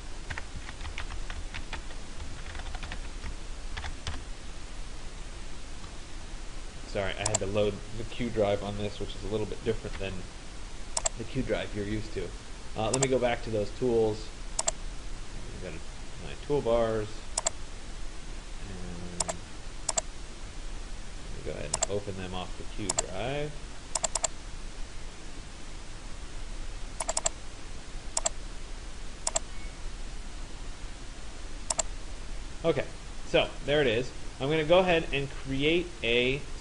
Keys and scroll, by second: 3.6 Return.